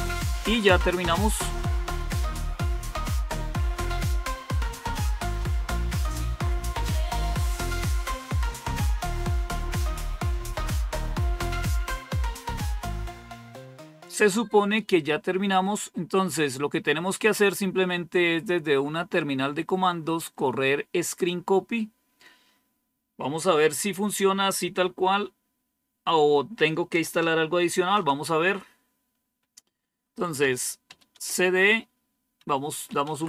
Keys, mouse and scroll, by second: 1.8-4.3 scroll down 1, 4.3-5.5 scroll down 1, 7.7-8.9 scroll down 2, 9.8-10.6 scroll up 2, 15.1-15.8 scroll down 2, 27.6 super+1, 30.3-30.8 typing, 31.0 Return, 32.3-33.2 typing.